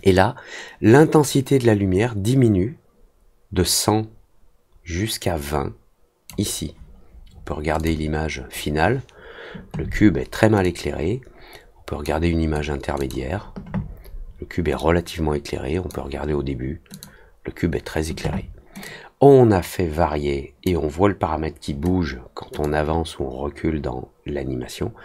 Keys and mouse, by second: 7.7 click, 10.6-12.0 drag, 12.9 click, 14.7-15.8 drag, 16.9 click, 18.8-20.6 drag, 22.6-25.0 drag.